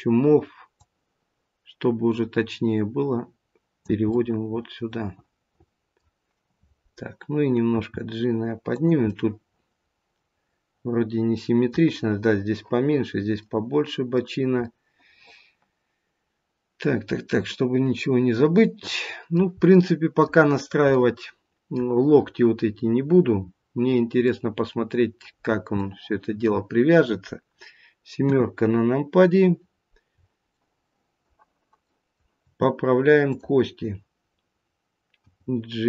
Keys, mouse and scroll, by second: 0.7 click, 4.0 middle click, 7.8 g, 9.0 middle click, 13.3 middle click, 14.1 middle click, 17.6 middle click, 19.7 middle click, 20.9 middle click, 22.8-23.2 scroll down 1, 24.2 middle click, 25.3 scroll down 3, 25.7 middle click, 28.1 KP_7, 28.8-29.4 scroll up 1, 30.0-30.4 scroll up 2, 30.4 shift+middle click, 31.9 shift+middle click, 33.2 click, 35.2 g.